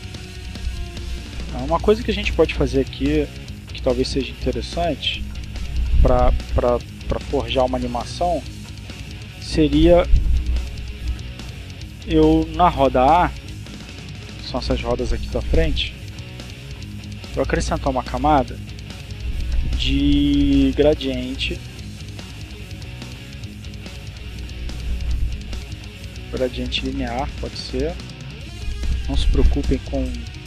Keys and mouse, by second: 8.6 click, 10.6 click, 13.6-14.6 drag, 15.4 click, 16.3 right click, 25.6 click.